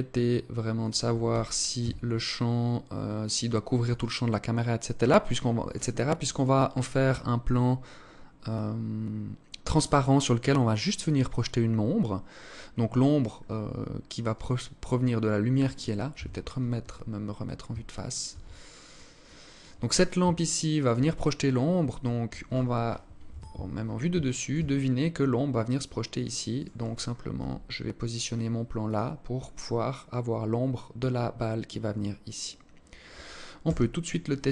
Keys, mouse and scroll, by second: 0.8 g, 13.7 right click, 15.6 KP_1, 16.5 scroll up 5, 17.3 alt+shift+click, 18.0 alt+click, 18.7 alt+click, 19.8 alt+shift+click, 22.7 KP_7, 23.8 alt+shift+click, 24.1-24.5 scroll down 6, 26.0 right click, 26.9 g, 33.1 KP_0.